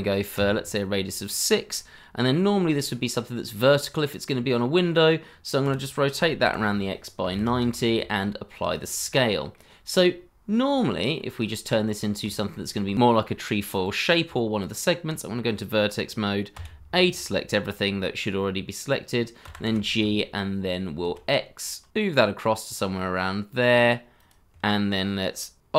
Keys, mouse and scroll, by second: 0.3 Return, 1.7 middle click, 5.6 r, 6.4 x, 7.2 KP_9, 7.3 KP_0, 7.4 KP_Enter, 7.8 ctrl+a, 9.1 middle click, 11.1 scroll up 1, 11.5 shift+middle click, 12.4 shift+middle click, 14.2 Tab, 16.5 Tab, 19.4 g, 19.6 y, 21.0 c, 21.2 x.